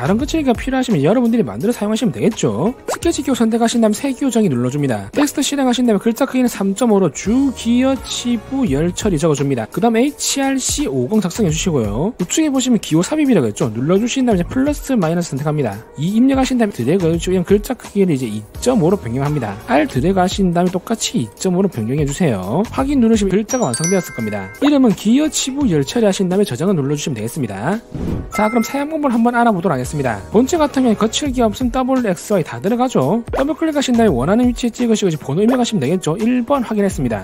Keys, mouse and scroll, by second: 3.5 click, 3.7 right click, 4.8 click, 7.4-11.3 typing, 14.3 click, 15.8 click, 15.9 2, 16.4 click, 18.2 click, 19.4 click, 19.7-20.8 drag, 21.5 click, 22.5 click, 23.3 click, 27.5 click, 33.3 click, 33.4 click, 35.2 click, 36.6 1, 37.0 click.